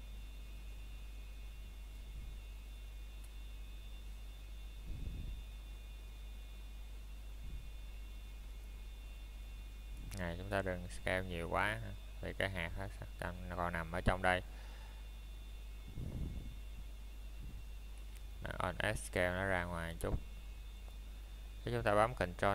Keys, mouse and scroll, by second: 0.4 middle click, 0.8 scroll down 1, 4.8 Tab, 5.8 click, 6.4-6.8 scroll down 1, 6.8 middle click, 7.5 scroll up 1, 9.1 click, 9.7 middle click, 10.3 shift+middle click, 11.4-12.1 scroll up 1, 12.6 middle click, 13.6-15.1 scroll up 1, 15.5 Tab, 16.3 click, 16.8 middle click, 17.0-17.3 scroll up 1, 17.3 middle click, 17.6 shift+middle click, 18.4 scroll up 1, 20.4 scroll down 1, 20.4 middle click, 20.8 scroll up 1.